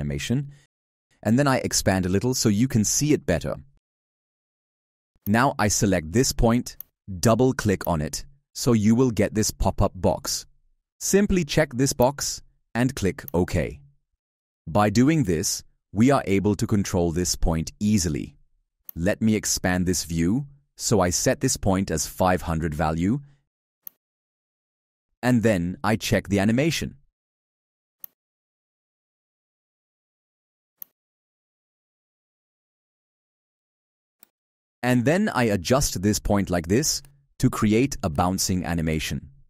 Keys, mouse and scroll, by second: 1.5 alt+scroll, 2.7 alt+scroll, 3.5 scroll.